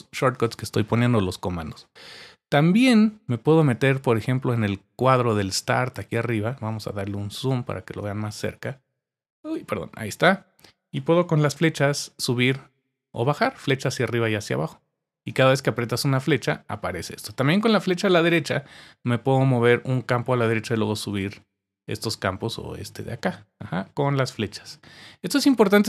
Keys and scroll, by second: 11.7 Up, 12.4 Up, 12.7 Up, 13.0 Up, 13.4 Down, 13.9 Down, 14.3 Down, 14.7 Down, 15.3 Down, 17.5 Right, 20.2 Up, 20.4 Up, 20.5 Up, 20.9 Down, 21.1 Down, 21.2 Down, 22.0 Right, 22.2 Up, 22.6 Up, 22.7 Up, 22.9 Up, 23.1 Up, 23.5 Left, 24.0 Left.